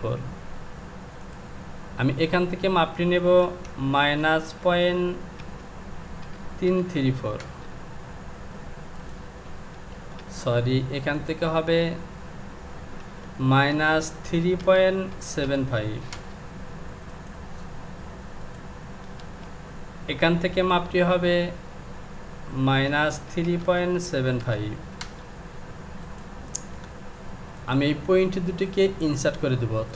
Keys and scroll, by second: 6.2 KP_7, 6.7 KP_5, 7.4 Return, 13.0 Down, 15.1 KP_7, 15.4 KP_5, 16.1 Return, 19.2 space, 24.4 KP_5.